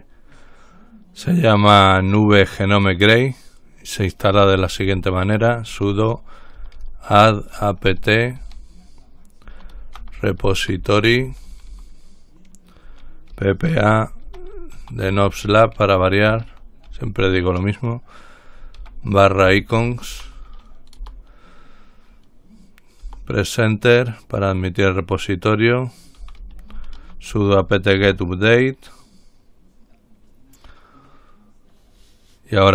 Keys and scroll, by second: 4.4-17.6 typing, 19.0-21.7 typing, 23.0-23.7 typing, 26.2-28.4 typing, 29.7-30.2 typing.